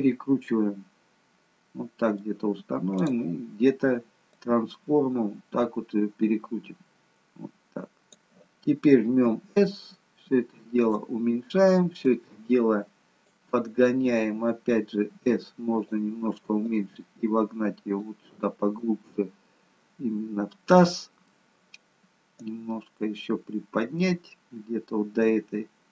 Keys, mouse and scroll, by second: 3.0 click, 4.4 click, 9.3 s, 12.1 click, 16.7 click, 16.7 s, 18.8 middle click, 22.4 click.